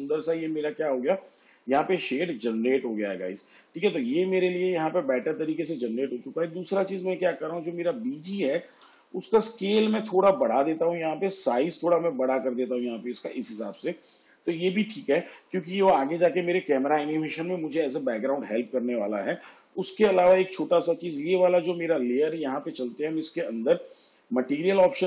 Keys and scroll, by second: 8.9 s.